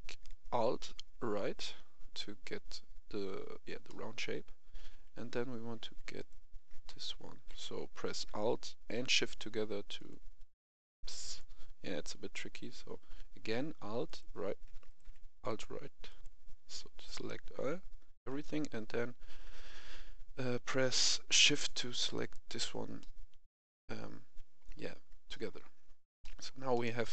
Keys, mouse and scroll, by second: 3.8 middle click, 4.4-5.2 scroll up 1, 5.2 middle click, 6.1 alt+right click, 9.9 alt+shift+right click, 14.0 alt+right click, 14.8 right click, 15.4 alt+right click, 22.0 shift+right click, 22.9-25.0 middle drag, 26.9 Escape.